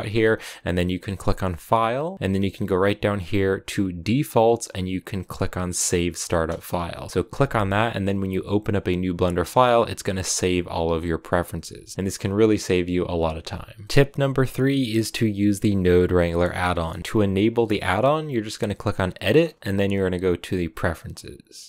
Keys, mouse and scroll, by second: 13.8 shift+a.